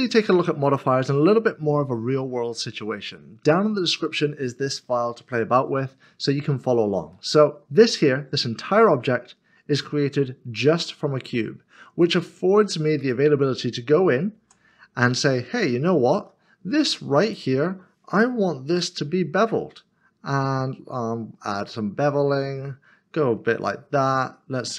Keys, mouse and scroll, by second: 7.1 middle click, 12.0 click, 15.8 Tab, 17.2 click.